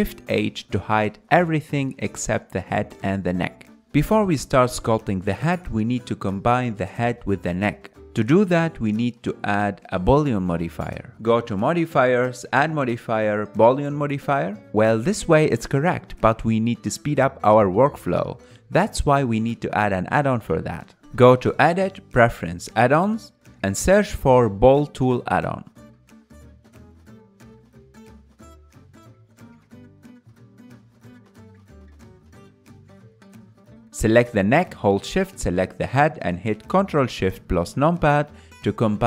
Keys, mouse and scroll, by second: 2.1 shift+h, 4.2 KP_Decimal, 6.1-8.4 middle drag, 8.4 click, 9.9-39.0 drag.